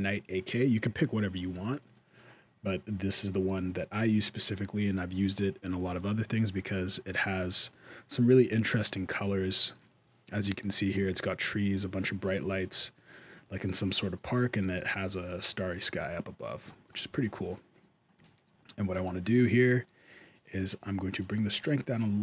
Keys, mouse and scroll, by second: 9.6 middle click, 11.0 shift+middle click, 12.1 middle click, 13.7 middle click, 14.3 shift+middle click, 14.7 middle click, 16.5 shift+scroll up 1, 16.5 shift+middle click, 16.9 alt+a, 17.0-17.5 scroll up 2, 17.5 middle click, 18.0 shift+middle click, 18.8 shift+middle click, 19.6 click, 20.7 shift+click.